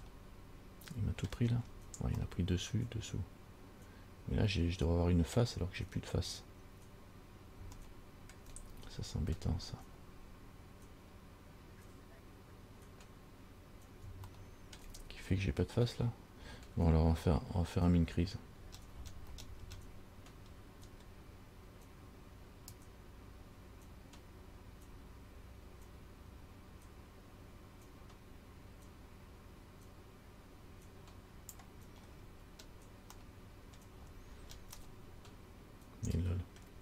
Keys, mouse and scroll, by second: 0.2 middle click, 1.7-2.3 scroll down 4, 2.5 middle click, 6.1-7.1 scroll up 5, 8.0 shift+middle click, 10.0 scroll down 4, 14.5 shift+middle click, 15.7-17.6 scroll up 3, 18.7-22.8 scroll up 20, 22.9 click, 32.2-33.3 scroll down 6, 33.4 middle click, 34.1-34.9 scroll down 5, 35.0 middle click.